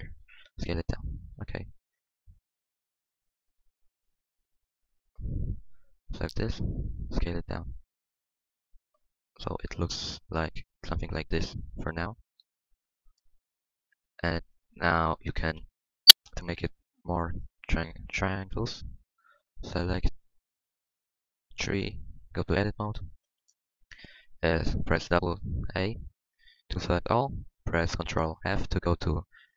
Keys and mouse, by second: 0.0 click, 0.3 s, 1.7 Tab, 2.6 Tab, 4.3 s, 4.9 s, 6.4-8.1 drag, 7.1 s, 8.1 Tab, 8.1 s, 10.9 Tab, 11.1 Tab, 11.4 z, 11.7 z, 11.9 a, 12.0 a, 15.5 Tab, 16.1 Tab, 16.6-17.8 middle drag, 18.2-20.3 middle drag, 21.7 middle click, 22.9 KP_1, 24.4 a, 24.6 a, 25.3-26.8 drag, 28.5 ctrl+f.